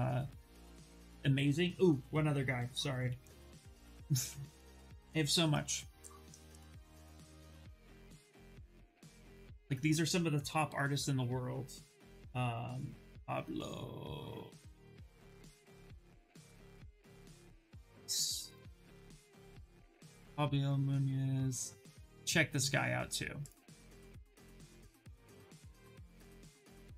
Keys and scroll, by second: 2.3-3.8 typing, 5.0 BackSpace, 10.1 p, 11.9-14.1 typing, 15.7-17.4 typing, 26.3 ctrl+v, 26.6 Return.